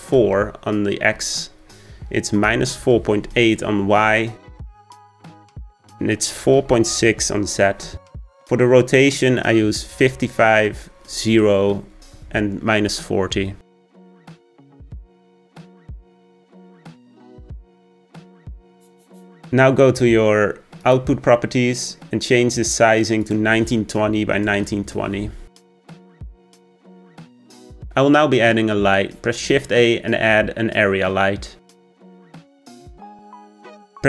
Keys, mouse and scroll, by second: 10.2 5, 15.6 KP_0, 16.4-17.2 scroll down 4, 17.2-18.0 scroll up 5, 21.0 click, 23.4-26.7 drag, 26.7-27.5 scroll down 2, 27.9 shift+a, 28.9 click, 30.1 shift+a.